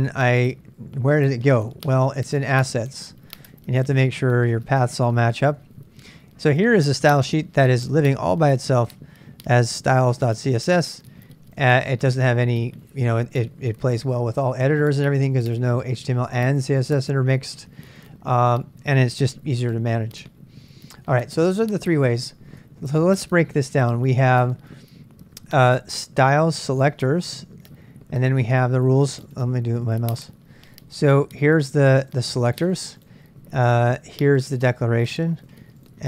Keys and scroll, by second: 0.0-5.8 typing, 3.8 Tab, 19.7 ctrl+[, 19.7 j, 19.9 j, 21.1 ctrl+[, 21.2-23.1 typing, 24.4-28.8 typing.